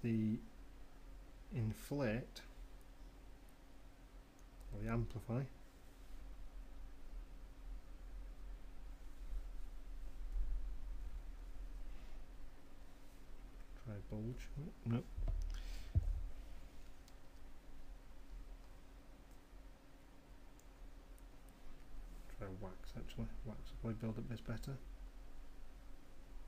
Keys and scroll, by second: 9.3 ], 10.0 ], 10.9 ], 17.3 ctrl+z.